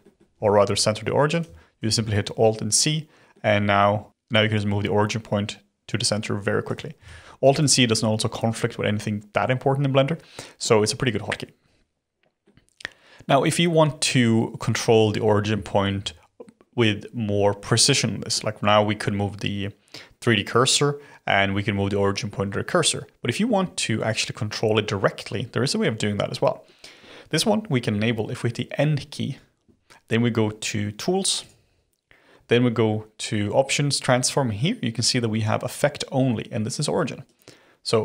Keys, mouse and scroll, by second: 0.0-1.3 middle drag, 1.3 click, 1.7 alt+c, 2.7 click, 3.3-4.1 middle drag, 4.1 click, 6.6 click, 7.0 alt+c, 7.4 click, 7.7 alt+c, 9.9-15.4 middle drag, 15.6-16.1 shift+middle drag, 16.1-17.9 scroll up 1, 17.9-20.9 middle drag, 27.8 n, 31.4 click, 37.2 click.